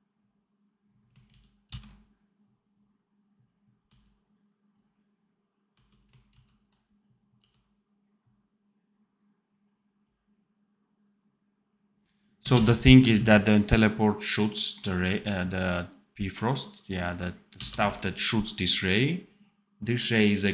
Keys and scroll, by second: 1.2 ctrl+z, 1.6 ctrl+s, 3.7 d, 5.7 d, 6.2 ctrl+z, 7.3 d, 12.5 ctrl+s, 17.5 d.